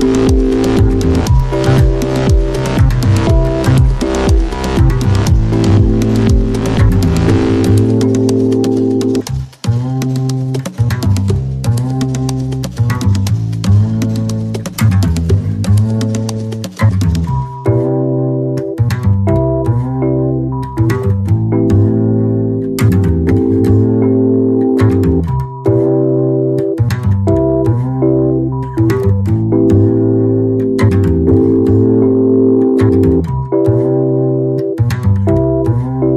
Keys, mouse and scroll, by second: 2.7-4.9 drag, 13.4-17.8 drag, 16.9 typing, 17.8-27.5 drag, 26.7 typing, 27.5 Left, 28.5-32.9 drag.